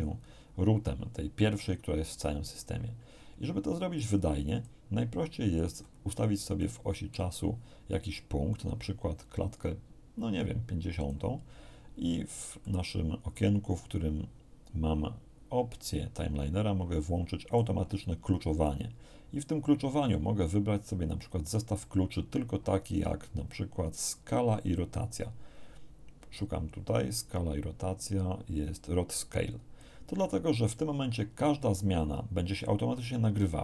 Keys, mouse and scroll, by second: 3.9 click, 5.7-6.3 scroll down 3, 6.5 middle click, 8.1-11.3 drag, 12.6 middle click, 17.5 click, 21.2 click, 27.1 scroll down 1, 29.5 click.